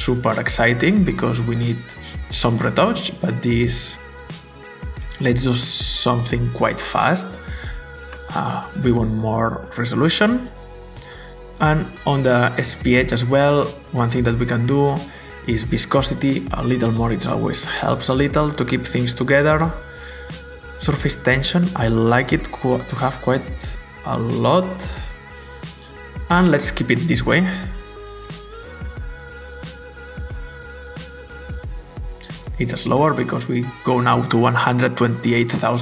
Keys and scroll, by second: 7.4-8.3 typing, 10.5-11.7 typing, 16.3-17.1 typing, 22.6 typing, 23.0 Return, 25.0 typing, 25.6 Return, 27.6-30.0 typing.